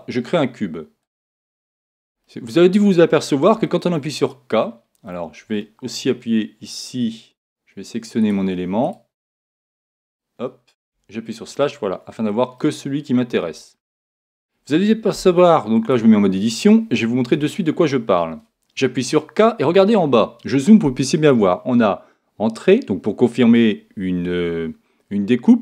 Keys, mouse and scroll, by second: 1.0 click, 2.2-6.7 middle drag, 8.2-11.9 right drag, 9.7 a, 11.8-15.7 middle drag, 15.9 Tab, 17.3 a, 19.0 k.